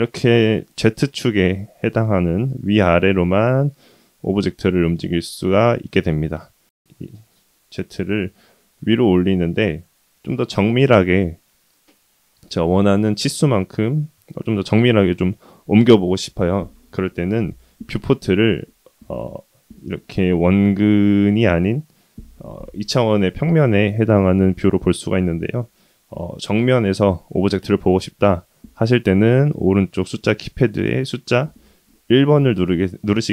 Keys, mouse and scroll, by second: 8.5-9.3 middle drag, 12.0-13.0 middle drag, 20.7-21.6 middle drag, 31.5 KP_1.